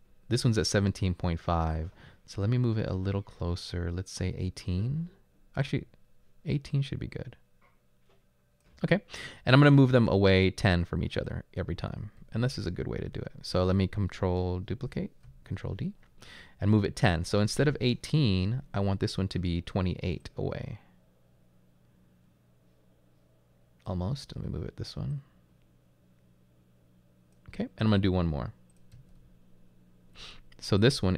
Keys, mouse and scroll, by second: 11.2 right click, 12.0-13.0 typing, 15.5 ctrl+d, 28.9-30.1 typing.